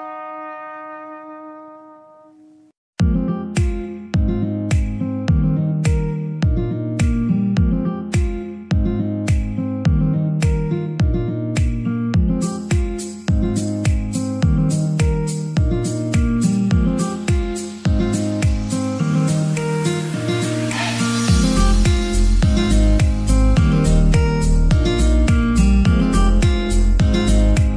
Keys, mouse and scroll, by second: 0.0-3.0 middle drag, 2.9 click, 3.0 click, 3.2 shift+d, 3.7 click, 4.0 r, 4.7 click, 5.6 click, 5.8 shift+d, 6.5 click, 7.0 r, 7.3 click, 8.0 click, 8.1 click, 8.3 shift+d, 10.0 click, 10.5 r, 11.1 click, 11.5 g, 12.0 click, 12.8 click, 12.9 g, 13.2 double click, 13.7 click, 13.9 g, 14.4 click, 15.0 click, 15.2 g, 17.0-17.4 scroll down 1, 17.4-23.8 middle drag, 23.8 KP_0, 24.5 scroll down 1, 24.5 middle click, 24.9 KP_1, 25.4 scroll down 1, 25.6 middle click, 26.3-27.2 scroll up 2, 27.2 shift+middle click.